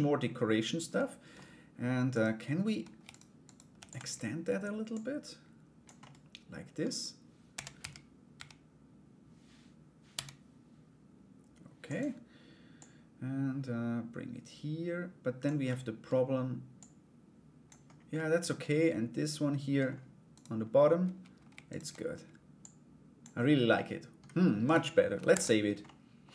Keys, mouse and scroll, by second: 0.5 middle click, 1.7 right click, 2.7 shift+right click, 3.0 shift+right click, 3.3 shift+d, 4.6 click, 5.6 middle click, 6.4 scroll down 1, 12.3-15.0 drag, 15.3 middle click, 15.6 scroll down 1, 16.3 click, 17.7 middle click, 17.9 scroll down 1, 18.1 scroll up 1, 18.2-19.4 middle drag, 19.9 right click, 21.3 shift+right click, 22.2 click, 23.3 middle click, 24.2 right click, 24.9 ctrl+s, 25.4 middle click.